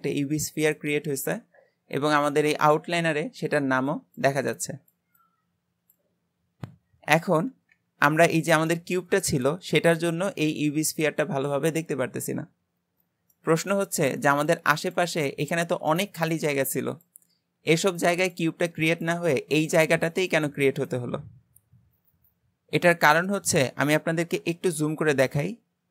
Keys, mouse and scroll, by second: 8.4-11.4 middle drag, 12.8-13.4 scroll down 2, 13.4-23.4 middle drag.